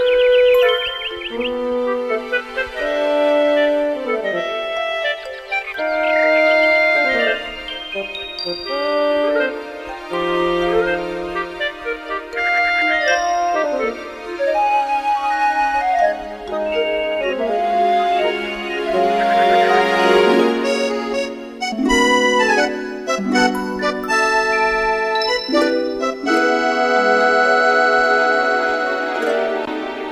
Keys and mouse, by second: 0.2 middle click, 0.5 middle click, 2.3 middle click, 14.8 middle click, 20.5 middle click, 21.6 middle click, 22.5 middle click, 23.3 middle click, 28.8 middle click.